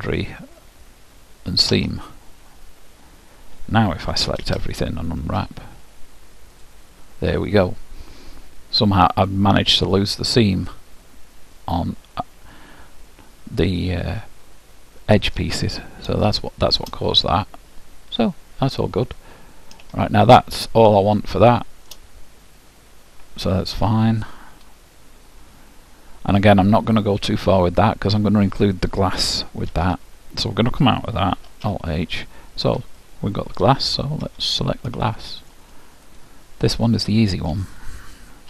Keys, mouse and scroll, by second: 4.2 a, 4.7 a, 5.4 u, 8.5-11.1 middle drag, 16.2-22.2 middle drag, 27.0-29.8 middle drag, 29.8 Tab, 31.4 alt+h, 32.4 middle click, 33.1-35.0 middle drag, 34.2 KP_1, 35.1 middle click, 36.1-38.1 drag, 38.3 middle click.